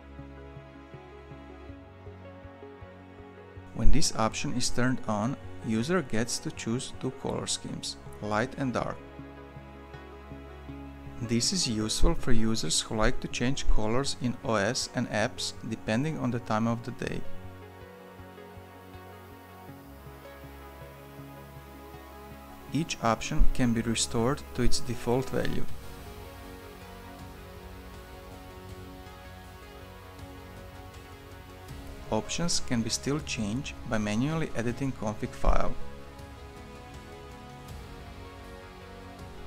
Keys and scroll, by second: 30.9 Escape, 36.6-38.6 typing, 38.8 ctrl+s.